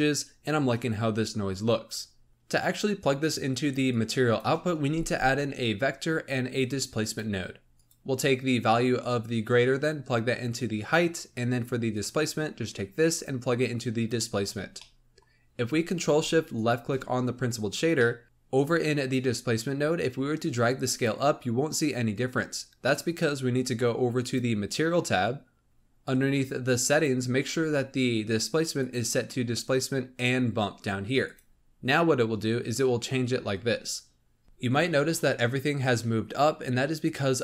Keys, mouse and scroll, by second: 2.3-3.8 middle drag, 3.8 click, 4.8 shift+a, 8.9 click, 11.9 click, 14.4-14.9 scroll down 5, 14.9-16.5 middle drag, 16.5-17.9 ctrl+shift+drag, 17.9 middle click, 20.3-23.4 drag, 24.1-25.6 drag, 25.6-26.8 scroll down 15, 26.8-27.2 drag, 27.2-27.7 scroll down 4, 28.7-31.7 drag, 32.9 scroll down 4.